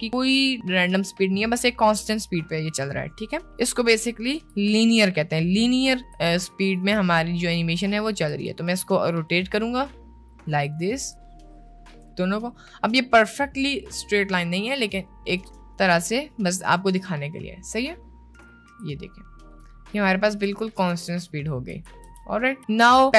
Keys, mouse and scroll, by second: 3.5 click, 4.6 s, 6.0 r, 8.4 r, 10.7 click, 11.1 r, 12.1 r, 15.0 click, 15.6 space, 18.4 space, 18.6 click, 18.8 space, 21.8 space, 22.2 space, 22.8 space.